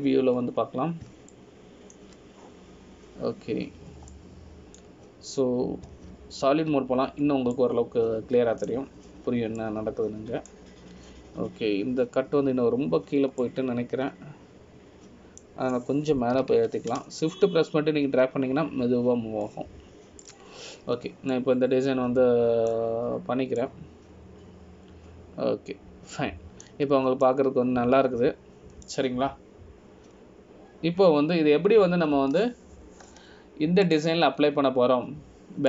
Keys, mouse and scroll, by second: 0.6 KP_3, 2.3 scroll up 2, 3.5 shift+middle click, 3.5 scroll up 4, 5.8 scroll down 1, 6.3 middle click, 7.0-8.0 scroll down 1, 8.0 z, 9.4-9.7 scroll down 2, 9.7 middle click, 11.4-11.8 scroll up 1, 11.8 middle click, 15.6 middle click, 18.5 g, 22.9 scroll down 1, 23.5 middle click, 23.5 scroll down 2, 25.4 scroll up 1, 25.8 middle click, 29.1-29.4 scroll up 1, 29.4 middle click, 32.3 scroll down 1.